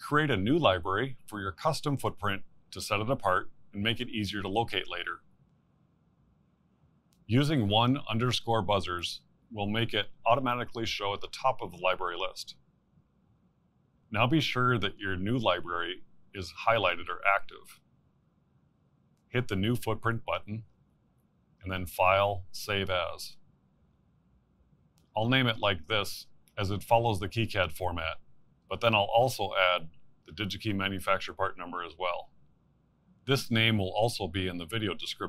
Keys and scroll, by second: 6.4 v, 10.5-12.8 typing, 14.1 Return.